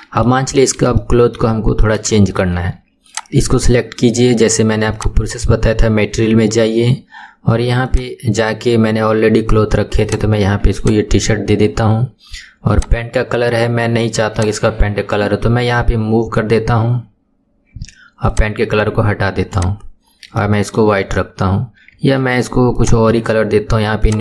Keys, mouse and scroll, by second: 0.0-0.6 shift+middle drag, 0.6 scroll down 1, 1.0-3.1 shift+middle drag, 3.1 click, 5.0 click, 7.9-10.9 drag, 12.8 click, 14.4-17.1 drag, 17.1-18.3 scroll up 8, 18.3-19.6 drag, 20.1-20.4 scroll down 2, 20.4-21.0 shift+middle drag, 21.0-21.6 scroll up 5, 21.6-22.8 scroll down 1, 22.8 click, 24.1-24.2 drag.